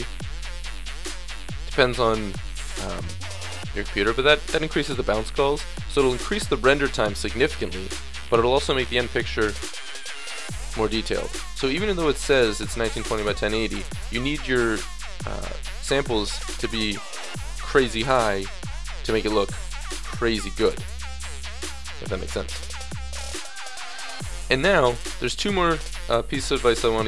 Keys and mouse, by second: 25.7-27.0 middle drag.